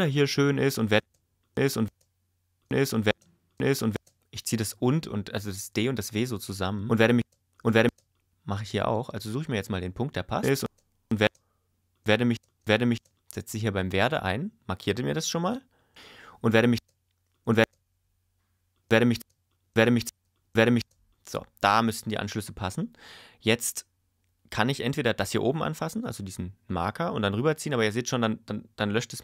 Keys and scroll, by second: 1.0 space, 6.8 space, 10.4 space, 15.9 space, 18.8 space.